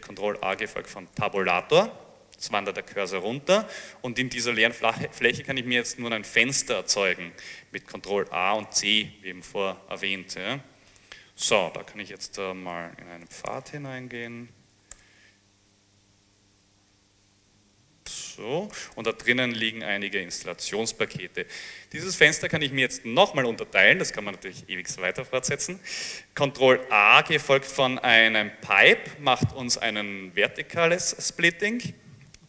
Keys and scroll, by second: 0.5 ctrl+a, 1.2 Tab, 8.3 ctrl+a, 8.7 ctrl+c, 11.5-17.4 typing, 15.0 Tab, 18.2 Return, 18.8 l, 19.0 Return, 19.0 l, 26.9 ctrl+a, 27.7 ctrl+alt+<, 27.9 ctrl+a.